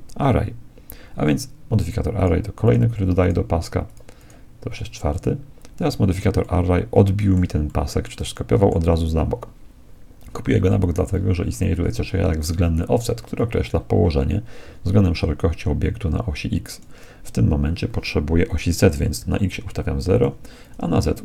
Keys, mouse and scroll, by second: 2.1-5.9 drag, 6.5-10.1 middle drag, 13.4-15.1 drag, 18.5-20.2 drag, 20.6-21.2 drag.